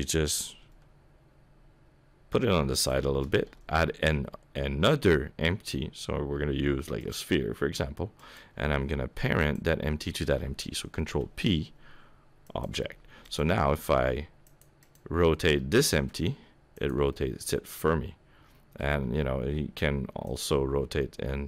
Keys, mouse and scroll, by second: 0.7 g, 3.5 shift+a, 8.2 click, 9.4 shift+click, 11.0 ctrl+p, 13.2 click, 13.8 r, 14.8 click, 15.5 r, 17.1 middle click, 19.0 r, 20.6 middle click.